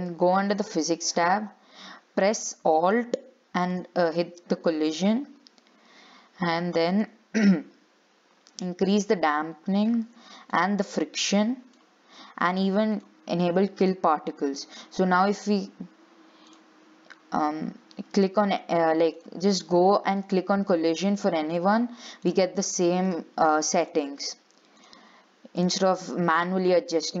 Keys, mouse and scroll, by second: 0.7 click, 3.9-8.2 alt+drag, 9.0-13.3 alt+drag, 15.0 click, 16.7-19.5 drag, 20.4-22.5 drag, 23.3 click, 25.0 click, 26.8-27.2 scroll down 4.